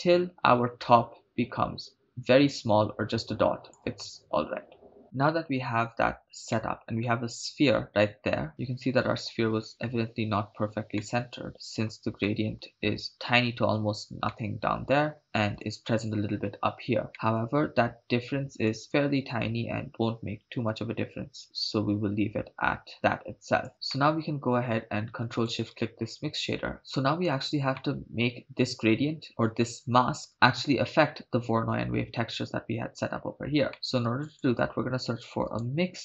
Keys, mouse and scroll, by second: 6.6-9.7 middle drag, 11.0 middle click, 12.2-12.6 shift+middle drag, 14.3-15.6 middle drag, 17.1 middle click, 18.7-23.7 shift+drag, 23.9 middle click, 25.9 ctrl+shift+click, 27.8 middle click, 33.7 middle click, 34.0 shift+a.